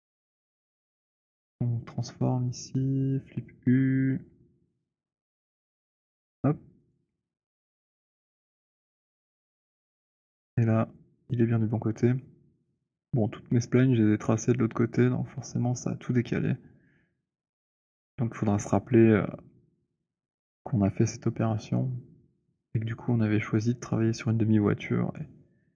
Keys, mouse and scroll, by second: 2.6 click, 3.8-4.3 scroll, 5.0-6.0 scroll, 6.9 click, 10.0 click.